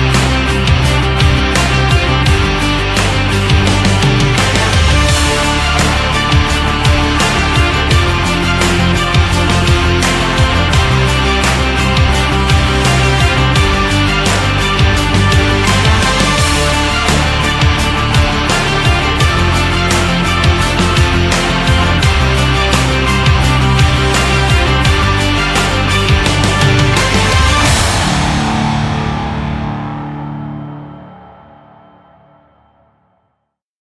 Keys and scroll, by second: 31.6 ctrl+0, 32.4 ctrl+-.